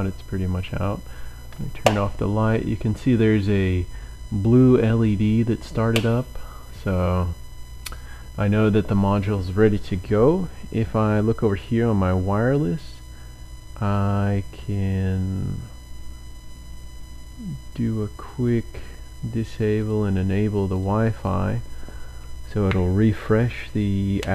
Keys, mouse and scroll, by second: 11.6 click, 18.5 click, 19.8 click, 20.8 click.